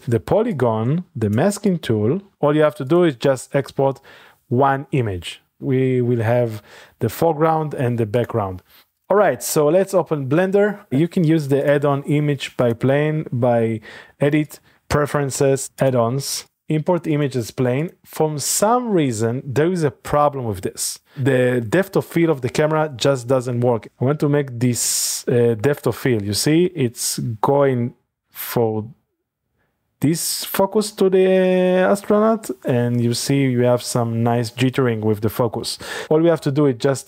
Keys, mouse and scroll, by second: 0.5-2.9 shift+drag, 3.0-4.2 drag, 6.0-8.8 drag, 9.2 click, 9.6-10.9 middle drag, 11.6-13.8 drag, 14.4 click, 15.8 click, 17.1 click, 17.8 click, 18.2-22.4 drag, 35.9 click.